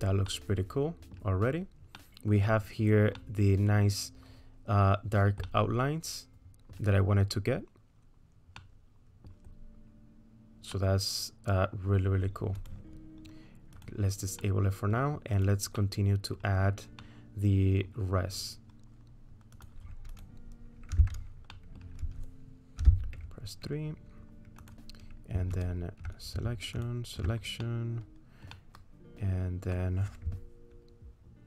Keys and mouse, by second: 0.3 middle click, 2.0 middle click, 3.2-5.2 middle drag, 5.6 middle click, 6.6 click, 6.6 right click, 8.6 click, 8.6 right click, 10.7 click, 10.7 right click, 11.3 middle click, 12.6 click, 14.5 middle click, 15.8 middle click, 15.9 click, 16.1 middle click, 17.1 middle click, 17.5 click, 17.5 right click, 19.6 click, 20.1 click, 20.9 Tab, 21.5 middle click, 22.8 3, 25.6 alt+click, 27.6 middle click, 28.5-29.8 middle drag.